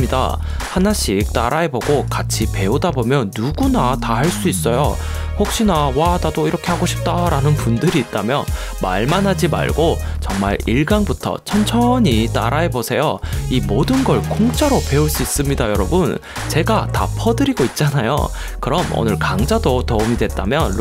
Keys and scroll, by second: 6.5 shift+Down, 7.5 shift+Up, 7.9 shift+Down, 16.5 shift+Up, 17.2 shift+Left, 17.4 shift+Up, 17.4 shift+Left, 17.6 shift+Left, 18.0 shift+Down, 20.3 shift+Up.